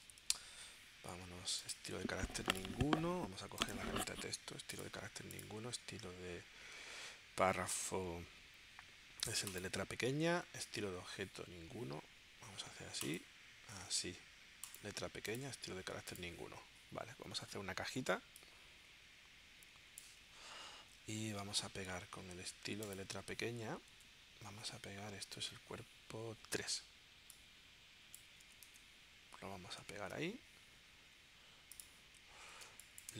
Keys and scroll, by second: 23.9 super+Tab, 28.4 super+c, 28.6 super+Tab, 30.0 super+v, 32.7 space.